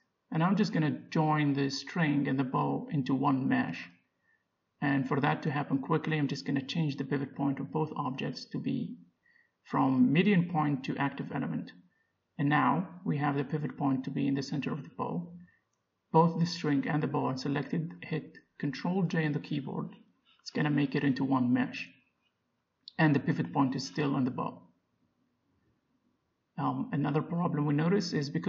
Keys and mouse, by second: 0.7 right click, 0.8-3.1 middle drag, 3.1-5.1 drag, 6.7-8.5 drag, 8.6 click, 18.5 ctrl+j, 20.0 g, 24.3 ctrl+z, 27.8 middle click, 28.2 middle click.